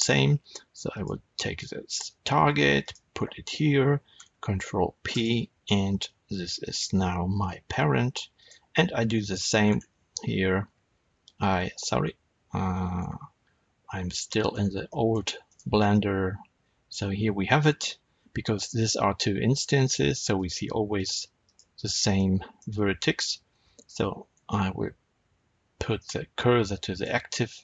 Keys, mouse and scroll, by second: 0.8 click, 2.7 shift+click, 4.1 ctrl+p, 5.1 Return, 6.5 click, 7.3 r, 8.4 right click, 9.2 Tab, 9.5 scroll up 1, 10.6 z, 11.9 Escape, 12.9 z, 14.4 scroll up 1, 14.8 middle click, 15.4 click, 15.8-20.2 middle drag, 18.0-20.2 scroll down 2, 20.2 click, 20.9 click, 21.3 click, 22.0 middle click, 24.3 shift+s.